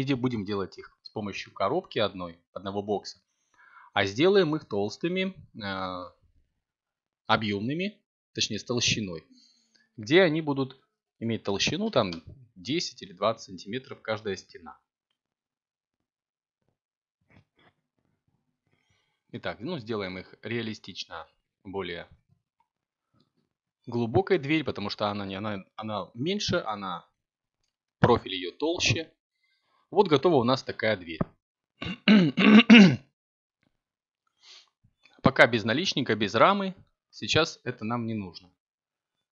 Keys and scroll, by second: 4.9 a, 5.7 Tab, 11.5 z.